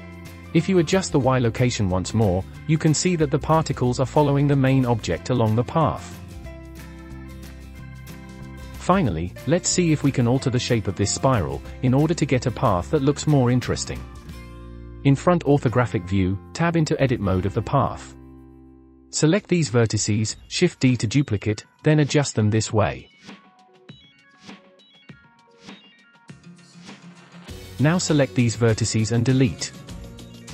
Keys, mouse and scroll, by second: 0.0 click, 0.3 scroll down 1, 0.4-0.8 shift+middle drag, 0.8 scroll down 3, 1.0-2.0 shift+middle drag, 2.0-4.9 drag, 5.2-6.0 middle drag, 6.0-6.4 scroll up 3, 6.4-8.0 shift+middle drag, 8.0 scroll up 2, 8.4-10.0 scroll down 6, 10.0 click, 11.7 KP_1, 12.3-12.7 scroll up 1, 12.7-14.8 shift+middle drag, 14.8 click, 16.4 Tab, 19.1 KP_1, 20.0 click, 20.5 shift+d, 22.2 r, 24.4 g, 25.1 r, 25.8 g, 28.9 click, 30.0 Delete.